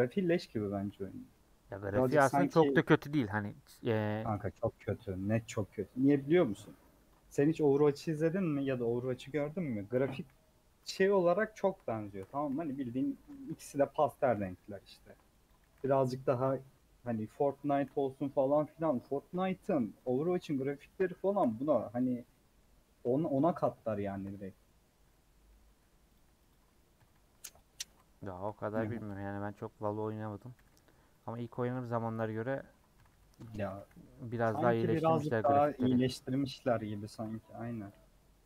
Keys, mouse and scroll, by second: 0.9 alt+z, 1.1-3.0 middle drag, 3.0 scroll up 1, 3.1 middle click, 3.9 Left, 4.5 3, 4.8 Left, 5.3 s, 6.8 KP_Add, 8.0 s, 8.9 1, 9.7 click, 10.1 KP_1, 11.0 KP_Decimal, 11.3-12.4 scroll up 9, 12.0 shift+middle click, 12.5 g, 13.3 g, 14.5 shift+middle click, 15.5 click, 15.6 g, 16.6-17.6 shift+middle drag, 17.6 click, 17.7 g, 19.1-20.1 shift+middle drag, 20.2 g, 21.1 shift+middle click, 21.6 scroll down 1, 21.8 3, 22.0 click, 22.1 scroll down 2, 22.3-23.6 middle drag, 23.6-23.9 scroll up 3, 24.0 shift+middle click, 24.3 scroll up 1, 24.9 scroll up 1, 25.1 middle click, 25.6 1, 26.1 click, 26.5 click, 27.0 g, 27.7 scroll down 2, 28.0 shift+middle click, 28.8 click, 29.1 g, 30.4 click, 30.6 g, 31.5 middle click, 31.8 scroll down 2, 32.3 click, 32.5 middle click, 33.0 g, 33.6 a, 35.1 m, 35.3 middle click, 35.8 3, 36.1 click, 36.9 KP_Add, 37.9 scroll down 4, 38.1-38.4 middle drag.